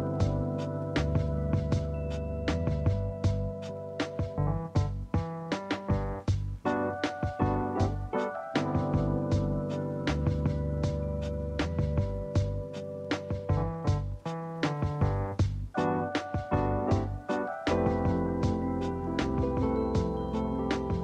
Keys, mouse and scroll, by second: 3.8 click, 5.1 click, 5.9 alt+z, 7.8 click, 9.5 click, 11.6 click, 12.4-13.7 middle drag, 13.7 s, 18.6-20.3 middle drag, 20.3-21.0 scroll up 1.